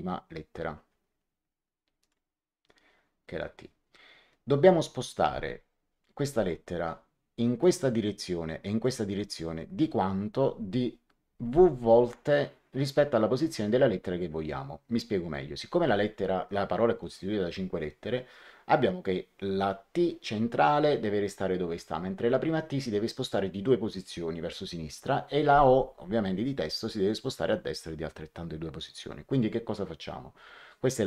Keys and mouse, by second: 1.9 click, 7.5 click, 8.7 click.